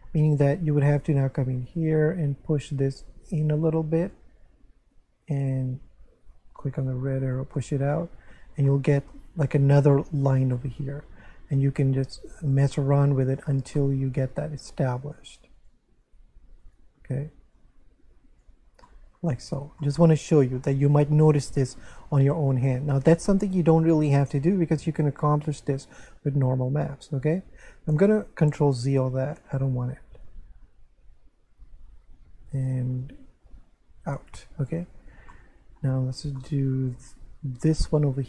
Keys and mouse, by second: 0.9 right click, 1.7 shift+right click, 2.7 click, 4.8 right click, 6.5 click, 7.6 middle click, 8.2 Tab, 8.7 middle click, 10.5 middle click, 11.5 Tab, 12.3 right click, 13.3 click, 13.8 middle click, 15.0 right click, 15.6 click, 16.0 right click, 16.6 shift+right click, 17.5 click, 18.8 middle click, 19.6 Tab, 19.8 middle click, 27.3 Tab, 28.3 ctrl+z, 34.4 a, 35.3 shift+middle click, 36.4 middle click, 37.7 right click.